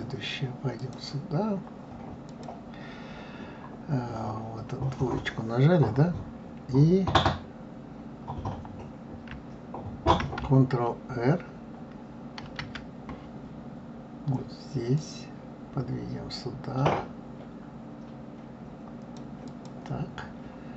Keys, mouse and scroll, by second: 0.8 click, 2.2 click, 12.4 ctrl+r.